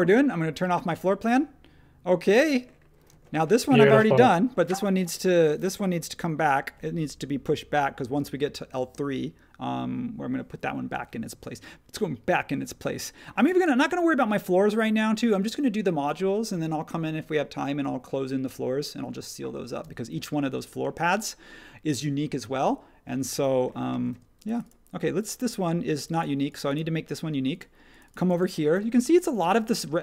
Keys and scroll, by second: 3.1 space, 13.3 space, 24.1 space.